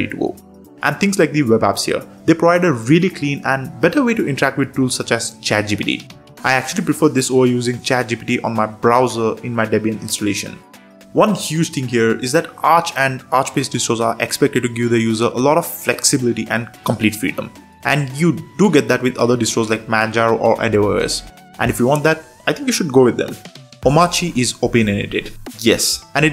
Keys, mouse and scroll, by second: 17.1 super+3, 23.5 click.